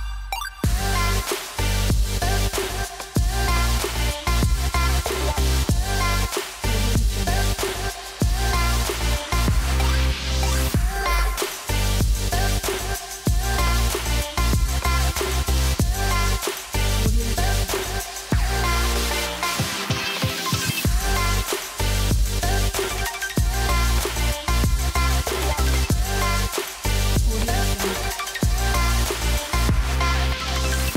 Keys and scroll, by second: 0.0-2.2 typing, 3.7-5.8 typing, 6.1 Return, 13.8 super+z.